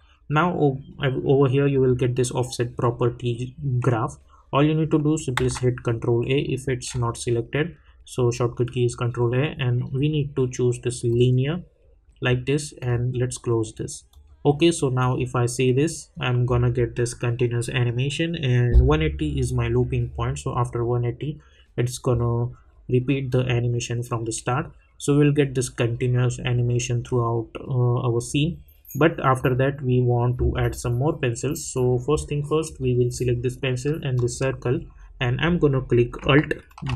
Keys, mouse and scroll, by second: 5.0 ctrl+Num_Lock, 5.0 click, 5.4 ctrl+a, 11.1 click, 28.2 click, 34.1 shift+click, 36.7 alt+Num_Lock, 36.7 shift+click, 36.8 alt+g.